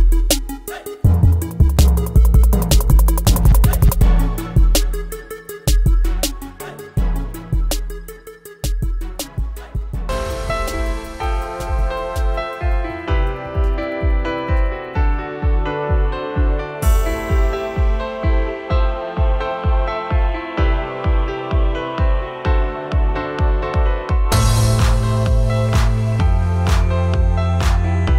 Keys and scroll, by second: 3.4 Down, 6.8 Down, 9.3 space, 14.8 t, 16.0 ctrl+a, 17.1 l, 18.3-22.0 typing, 23.1 e, 23.3 ctrl+Return, 24.0 v, 27.0 t, 27.6 ctrl+a.